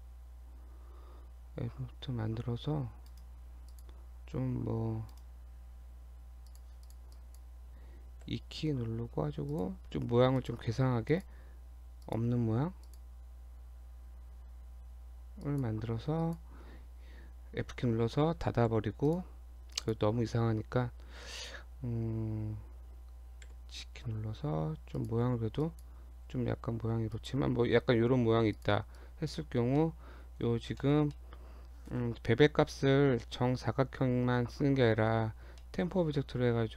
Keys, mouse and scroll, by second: 0.1 Tab, 1.8 Tab, 2.2 Tab, 3.1 right click, 5.2 right click, 6.5 click, 6.9 click, 7.2 click, 8.3 e, 9.8 e, 11.5 e, 12.3 e, 15.5 click, 16.3 shift+click, 18.7 f, 19.1 click, 19.8 click, 23.5 g, 25.6 click, 26.2 g, 28.3 Tab, 28.6 click, 29.0 click, 29.7 scroll down 2, 29.8 middle click, 30.4-30.7 scroll up 1, 30.8 shift+middle click, 31.2 middle click, 33.2 middle click, 35.6 shift+middle click.